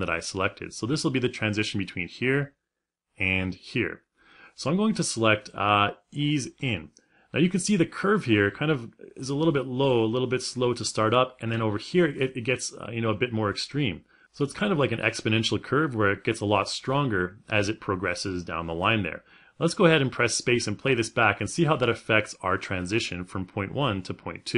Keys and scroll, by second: 24.3 space.